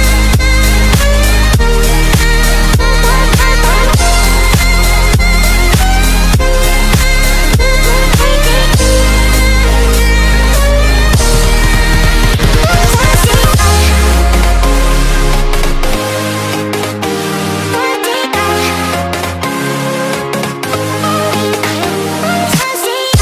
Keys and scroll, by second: 18.3-19.9 typing.